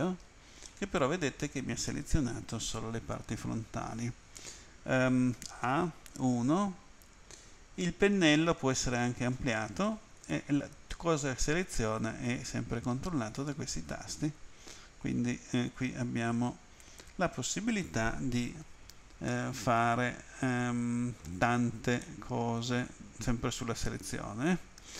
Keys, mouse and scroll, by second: 0.7 middle click, 5.4 a, 6.3 End, 19.3 middle click, 22.1 middle click.